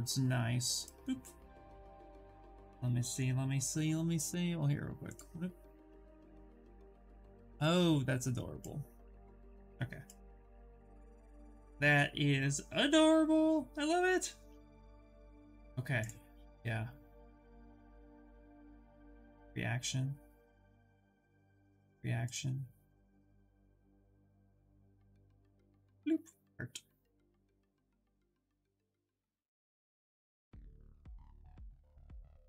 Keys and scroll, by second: 15.0 Escape, 23.7-25.0 typing.